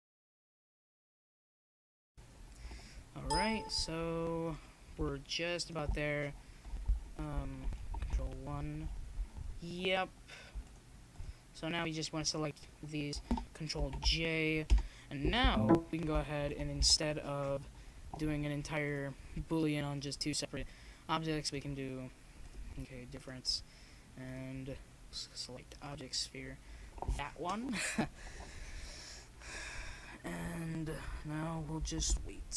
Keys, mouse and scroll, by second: 1.4 KP_3, 2.1 ctrl+KP_3, 5.2 s, 9.0 ctrl+KP_1, 12.0 right click, 12.1 click, 12.5 right click, 12.7 click, 15.9 ctrl+j, 16.8 KP_0, 19.1 z, 21.5-22.5 right drag, 23.4-24.6 drag, 25.5-29.8 drag, 29.2 middle click, 29.8-32.5 middle drag.